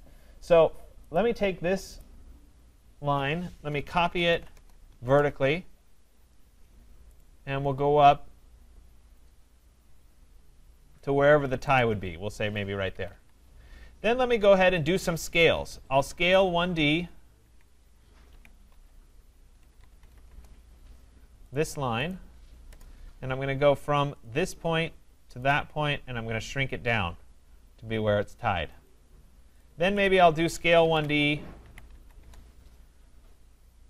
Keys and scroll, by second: 4.5 Return, 12.9 Escape, 19.6 BackSpace, 20.2 Return, 32.2 Return.